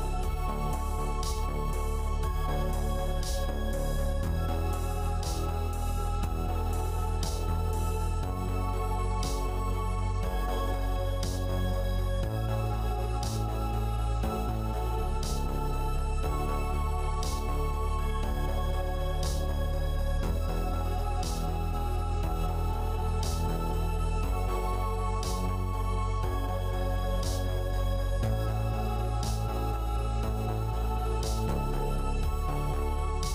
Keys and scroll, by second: 0.0-0.8 typing, 1.1 Return, 5.8 ctrl+i, 7.3 v, 12.1 a, 16.5 ctrl+d.